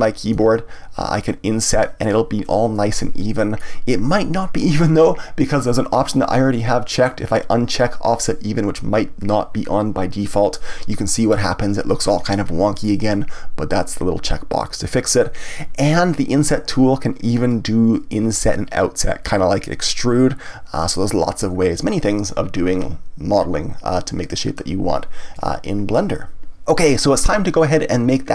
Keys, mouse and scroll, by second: 0.3 i, 2.1 click, 3.3-7.6 middle drag, 7.6 click, 10.5-14.5 middle drag, 14.5 click, 15.5-17.5 middle drag, 17.5-20.5 drag.